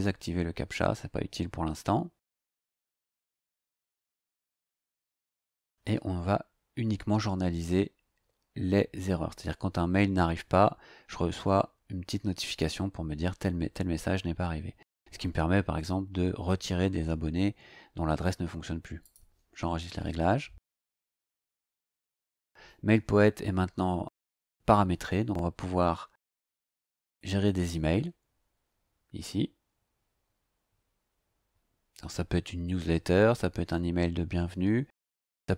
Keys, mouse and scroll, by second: 2.5 scroll down 2, 4.8-5.1 scroll down 2, 19.0 click.